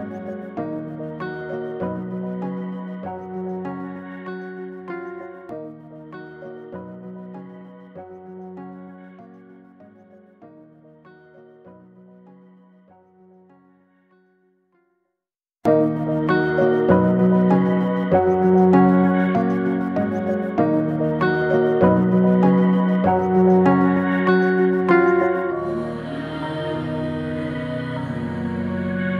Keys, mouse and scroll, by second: 1.3-3.0 drag, 3.5 alt+click, 4.0 middle click, 4.9 alt+shift+click, 5.4-6.7 middle drag, 6.7 e, 10.2-11.7 middle drag, 11.7 scroll up 1, 12.7 click, 13.1 shift+click, 13.5 shift+click, 14.1 shift+click, 14.8 shift+click, 15.3 shift+click, 15.9 shift+click, 16.4 shift+click, 17.0 f, 17.6 Tab, 17.9 scroll down 1, 18.2 click, 18.5-19.5 middle drag, 19.5 scroll down 3, 19.7-22.5 middle drag, 23.0 click, 23.8 click, 24.6-26.8 drag, 26.8-27.8 middle drag, 27.8-29.1 right drag, 29.1 drag.